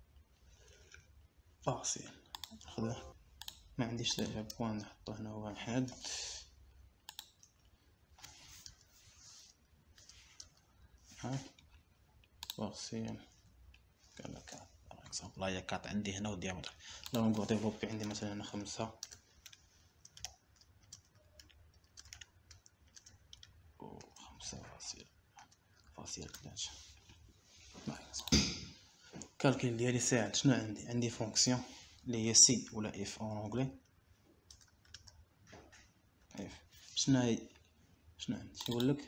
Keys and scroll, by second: 3.1 Return, 6.0 shift+1, 7.3 BackSpace, 8.8 1, 10.1 BackSpace, 10.8 shift+1, 11.7 BackSpace, 12.0 1, 14.8 4, 15.7 Return, 19.4-24.8 typing, 26.0 shift+3, 26.8 BackSpace, 27.1 3, 27.6 Return, 35.0 =, 35.9 BackSpace, 36.1 Caps_Lock, 36.2 =, 36.4 Caps_Lock, 37.3-38.3 typing.